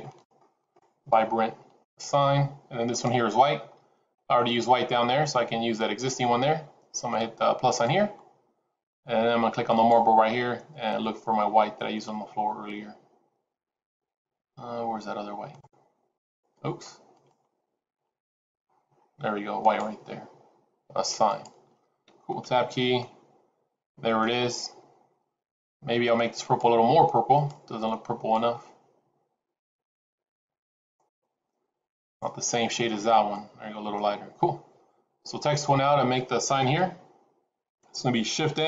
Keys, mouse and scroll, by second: 1.7 click, 2.8 click, 3.9 scroll down 2, 7.5 click, 9.6 click, 16.1 click, 17.1 click, 21.2 click, 22.3 Tab, 22.9 middle click, 24.3-24.9 scroll up 3, 25.2-25.6 scroll down 1, 26.3 click, 27.3 click, 33.0 scroll down 2, 33.2 middle click, 36.7 KP_1, 38.4 shift+a.